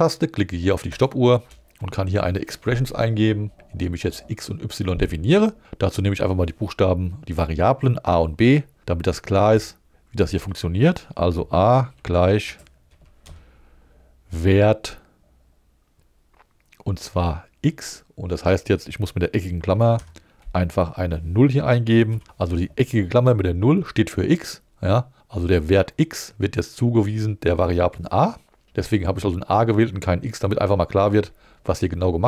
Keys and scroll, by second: 9.6 a, 10.4 space, 11.9-13.7 typing, 19.9 alt+5, 22.1 0, 28.6 Right.